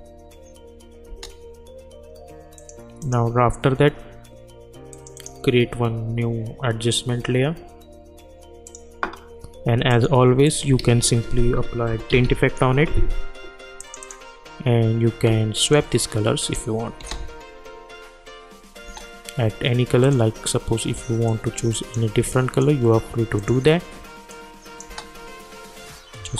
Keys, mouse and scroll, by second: 2.6 click, 3.0 right click, 4.9 click, 5.1 right click, 6.7 right click, 8.6 click, 10.8 ctrl+a, 11.4-12.7 typing, 13.8 click, 17.0 space, 18.9 space, 20.0-24.8 drag, 24.8 space.